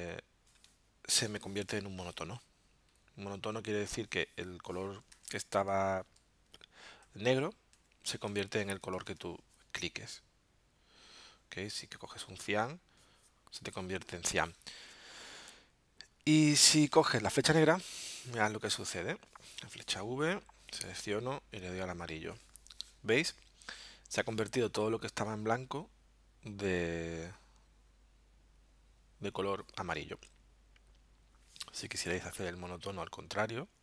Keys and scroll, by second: 5.1 super+z, 6.5 super+z, 7.7 super+z, 9.1 super+z, 19.6 v, 32.0 super+z.